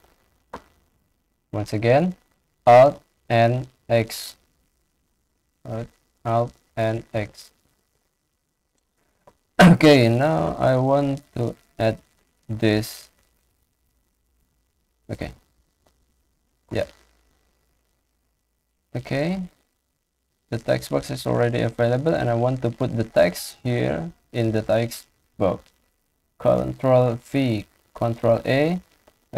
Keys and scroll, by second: 3.0 alt+n, 3.6 alt+x, 6.5 alt+n, 6.8 alt+x, 25.2 ctrl+v, 27.5 ctrl+a.